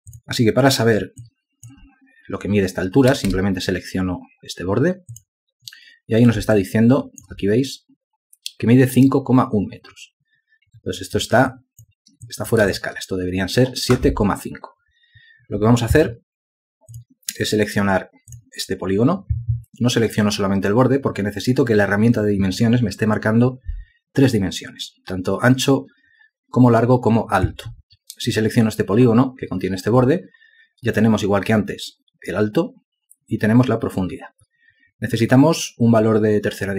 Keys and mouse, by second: 1.6 ctrl+alt+click, 3.5 space, 6.9 ctrl+alt+click, 11.9 alt+click, 12.7 ctrl+alt+click, 13.1 alt+shift+click, 17.8 space.